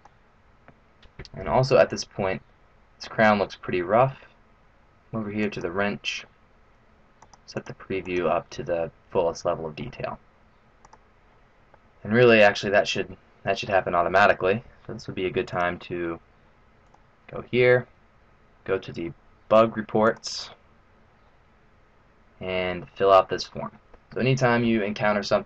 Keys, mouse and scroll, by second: 1.9 middle click, 5.4 click, 7.5 click, 8.0 click, 9.4 middle click, 10.8 click, 11.7 middle click.